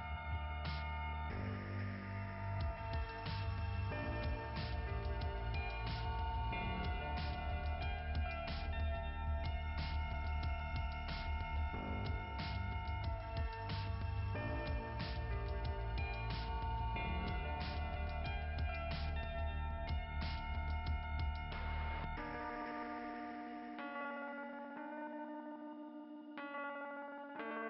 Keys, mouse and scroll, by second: 1.1 click, 2.6 click, 4.3 click, 4.4 click, 7.0 click, 7.5 click, 8.3 click, 9.0 click, 9.3 click, 9.7 click, 10.7 click, 15.3 click, 16.4 click, 17.4 click, 18.2 click, 20.2 click, 24.3 click.